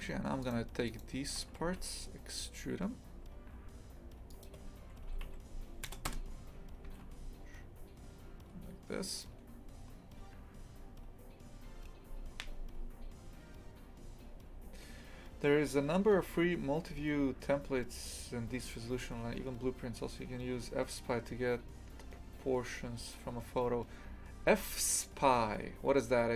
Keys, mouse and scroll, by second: 0.4 shift+right click, 0.9 shift+right click, 1.6 e.